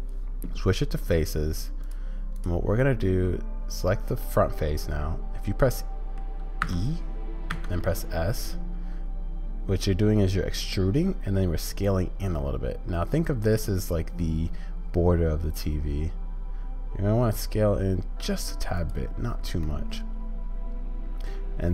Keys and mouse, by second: 1.0-2.8 drag, 2.8-6.1 middle drag, 19.6-21.7 middle drag.